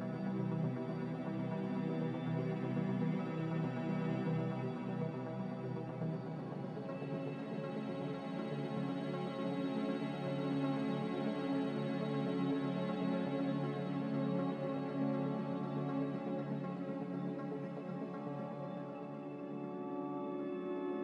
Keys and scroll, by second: 2.8 Delete, 3.2 a, 12.6 z.